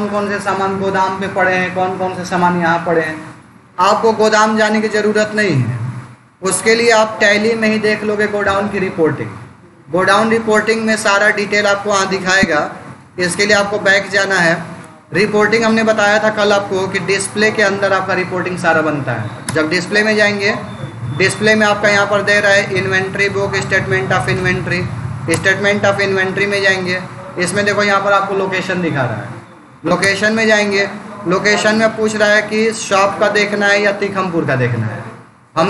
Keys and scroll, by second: 12.4 Escape, 14.8 Down, 19.3 Return, 21.0 Down, 24.1 Up, 24.4 Down, 25.2 Return, 27.0 Down, 27.5 Up, 29.9 Return, 32.0 Down, 34.1 Down.